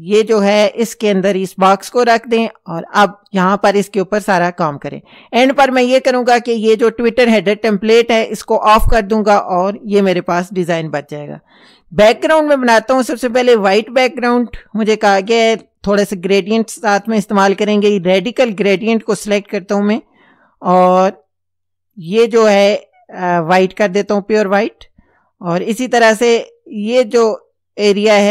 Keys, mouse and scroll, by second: 0.7-1.5 drag, 2.3 click, 8.4 click, 14.0 click, 18.4 click, 22.0 click, 23.9-24.8 drag.